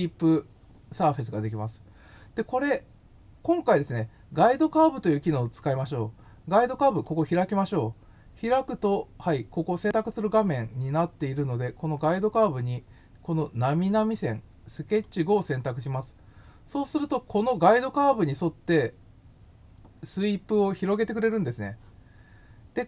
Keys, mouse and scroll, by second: 7.0 click, 15.0 click.